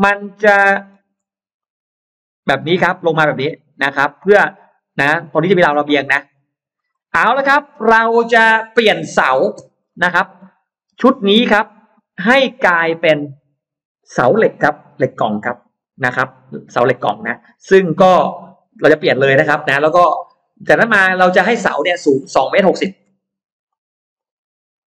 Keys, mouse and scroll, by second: 0.9 shift+x, 1.5-4.2 drag, 5.5-6.5 drag, 6.7 right click, 8.0-8.3 scroll up 2, 8.3 middle click, 9.3 scroll down 2, 9.7 middle click, 10.3 scroll up 2, 11.5 click, 22.7 shift+x, 23.5 click, 24.0 shift+click.